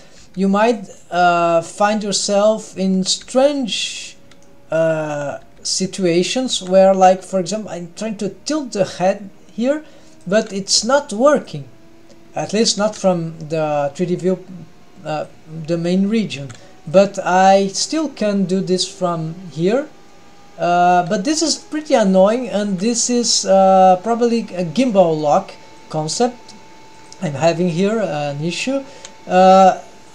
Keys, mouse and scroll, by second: 0.2 g, 0.9-1.4 middle drag, 1.8 g, 2.6-3.1 middle drag, 3.2 g, 4.0-4.4 scroll up 2, 4.4 middle click, 5.5 g, 6.5 r, 10.7 g, 12.8 r, 16.3 r, 17.7-21.0 drag, 22.4 g, 22.7 r, 24.8-25.2 scroll down 2, 25.2-25.9 middle drag, 26.1 g, 27.5 scroll up 1, 27.7-28.3 middle drag, 29.5 g.